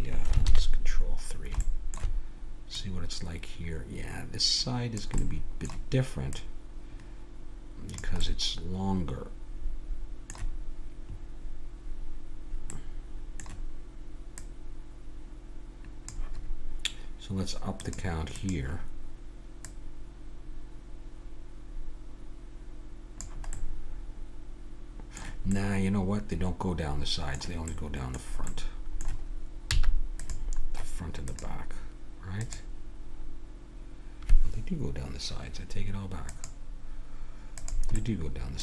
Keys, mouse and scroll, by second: 0.4 ctrl+KP_3, 2.7-4.5 drag, 5.2-6.3 middle drag, 6.3-8.2 drag, 8.2-9.4 middle drag, 14.4-16.3 drag, 17.8-21.5 drag, 23.5 middle click, 29.7 x, 31.3-33.2 drag.